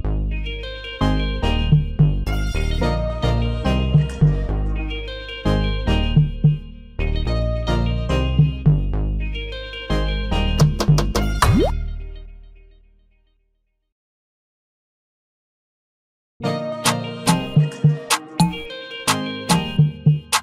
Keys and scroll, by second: 0.2 ctrl+=, 7.9 ctrl+t, 18.0 ctrl+-.